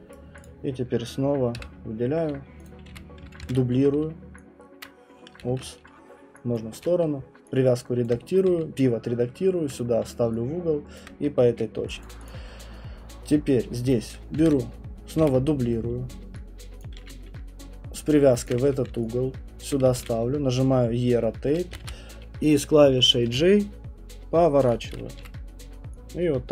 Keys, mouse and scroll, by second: 0.1 right click, 0.5 click, 1.5 Delete, 2.7 click, 2.9 w, 3.4 ctrl+d, 4.0-4.8 v, 4.7 middle click, 4.8 click, 5.5 ctrl+z, 6.5-12.0 typing, 6.5 click, 8.1 click, 11.0 click, 12.0 alt+click, 12.3 click, 14.4 ctrl+d, 15.2 w, 16.7-20.5 typing, 16.8 click, 18.5 click, 19.7 click, 21.6 click, 21.9 ctrl+z, 23.0-25.2 typing, 24.7 click.